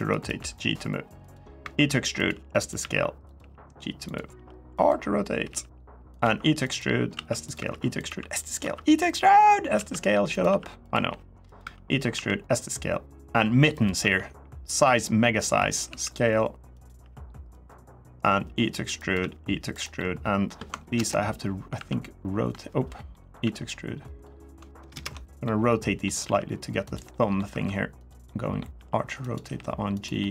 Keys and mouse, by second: 0.1 g, 1.0 click, 1.4-4.1 typing, 1.9 click, 2.5 click, 3.0 click, 3.8 click, 4.5 click, 5.2-8.4 typing, 5.9 click, 6.4 click, 7.2 click, 7.7 click, 8.3 click, 9.0 click, 9.5-11.9 typing, 10.1 click, 10.6 click, 11.2 click, 11.7 click, 13.5 click, 13.8 e, 15.3 click, 15.6 s, 16.5 click, 17.0 r, 17.3 click, 18.1 e, 18.7 click, 18.9 e, 19.5 click, 19.7 middle click, 20.7 ctrl+KP_Enter, 21.5 ctrl+z, 22.9 middle click, 23.2 e, 23.9 click, 24.5 ctrl+KP_Add, 24.8 ctrl+KP_Add, 25.2 middle click, 26.0 r, 26.6 click, 26.9 middle click, 27.3 3, 28.0 middle click, 28.5 r, 29.0 click, 29.2 g, 29.7 click, 30.0 middle click.